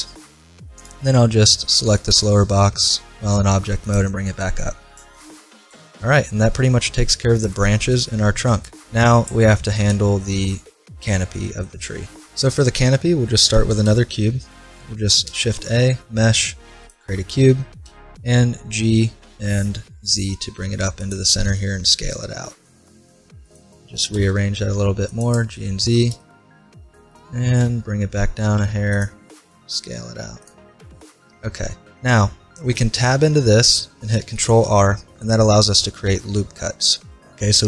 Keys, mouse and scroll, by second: 0.8-2.7 right drag, 1.9 g, 4.3-8.8 middle drag, 9.4 middle click, 11.0 middle click, 15.3 shift+a, 17.9 g, 21.5 s, 24.0 g, 25.6-27.4 middle drag, 27.4 g, 29.4 s, 32.6 middle click, 32.6 Tab, 34.2 ctrl+r.